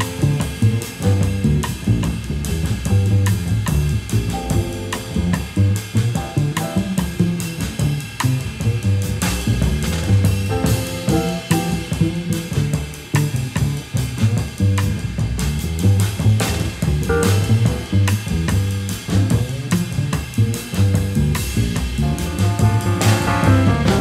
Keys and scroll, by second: 8.4 v, 18.8 a.